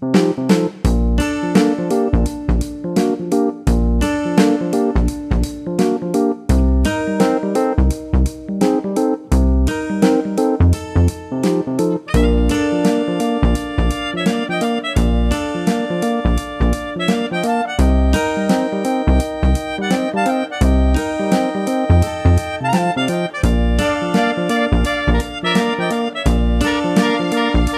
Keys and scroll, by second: 5.5 1, 6.5 Return, 17.4 super+d.